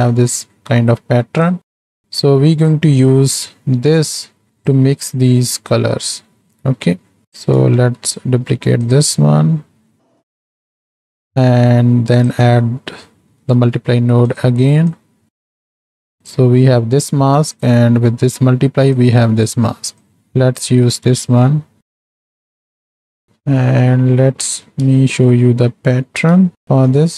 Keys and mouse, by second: 1.8 middle click, 2.1 right click, 2.6-4.1 right drag, 4.5 right click, 5.2 right click, 6.2 right click, 6.5 right click, 7.8 shift+d, 10.2 click, 10.7 click, 12.1 click, 13.4 shift+d, 15.0 click, 15.5-15.9 drag, 16.2 ctrl+shift+click, 19.0 click, 20.0 click, 20.9 click, 21.4 click, 22.8 ctrl+shift+click, 23.2 shift+middle click, 23.5-23.9 middle drag, 24.4 middle click, 25.1 shift+middle click, 25.7-26.1 middle drag, 26.5-26.9 shift+middle drag.